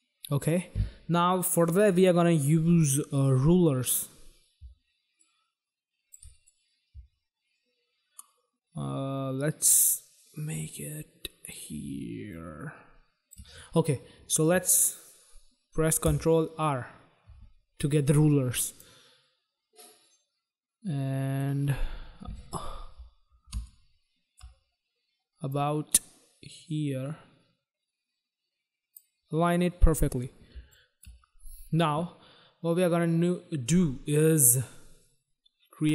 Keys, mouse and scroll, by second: 3.8 click, 5.1 shift+click, 6.4 click, 12.2 shift+click, 16.0 ctrl+r, 18.6 click, 21.6-22.1 scroll up 4, 22.1 scroll down 1, 22.8 scroll down 1, 23.4 space, 23.6 click, 24.0 space, 24.2 space, 25.5 click, 29.3-29.7 scroll down 2, 30.5 space, 30.7 click, 35.8 right click.